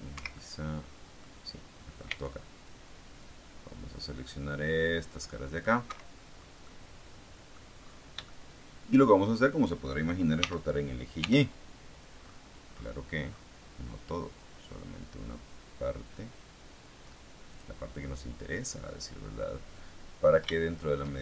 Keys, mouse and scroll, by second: 0.0 Escape, 0.2-1.3 middle drag, 2.0 c, 2.6-5.8 drag, 5.8 Escape, 6.4 scroll down 2, 6.6-7.6 middle drag, 8.2 shift+middle click, 10.3 r, 11.1 y, 12.2-14.1 scroll up 1, 17.4 click, 17.9 scroll down 1, 18.0-21.2 middle drag.